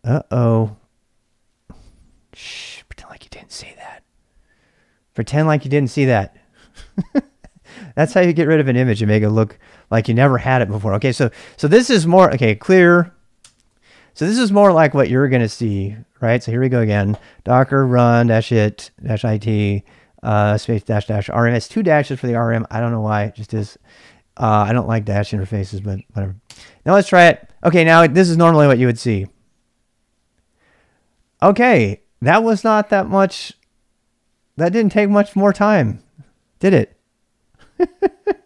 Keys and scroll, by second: 1.8 typing, 2.7 Return, 6.0-6.8 typing, 10.7 ctrl+[, 10.9 k, 11.3 k, 12.2 ctrl+c, 12.4-15.7 typing, 14.3 ctrl+[, 26.6 Return.